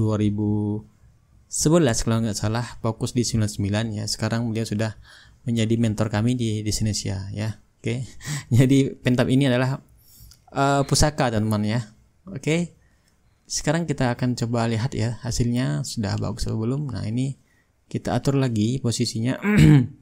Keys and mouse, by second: 0.5-5.8 right drag, 6.0-8.2 drag, 8.2 shift+right click, 8.7-13.0 shift+drag, 13.2-15.1 drag, 15.6-20.0 drag.